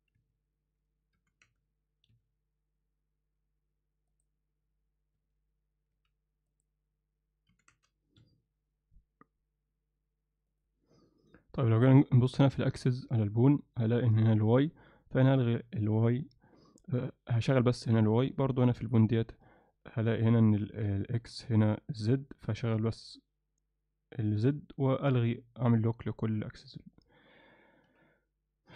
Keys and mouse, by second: 1.2 r, 4.1 click, 5.2 z, 5.9 z, 6.6 click, 7.5 r, 18.8 click, 27.4 click, 27.9 z.